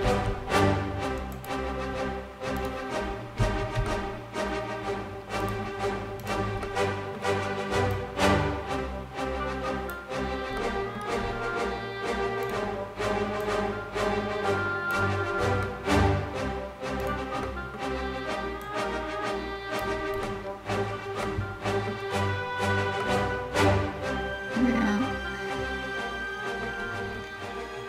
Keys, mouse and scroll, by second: 1.0 click, 1.3 scroll up 1, 2.2 right click, 3.5 middle click, 4.2 middle click, 5.1 click, 5.9 right click, 6.3 middle click, 7.5 click, 10.2 middle click, 10.9 scroll up 2, 12.1 right click, 13.1 click, 14.1 click, 14.9 scroll down 1, 15.3 middle click, 15.7-16.4 scroll up 1, 16.7 right click, 17.1 middle click, 18.3 click, 19.0 click, 19.9 middle click, 20.4 scroll down 1, 20.7 middle click, 21.6 scroll up 1, 22.2 scroll down 1, 22.6 middle click, 23.4 middle click, 27.5 click.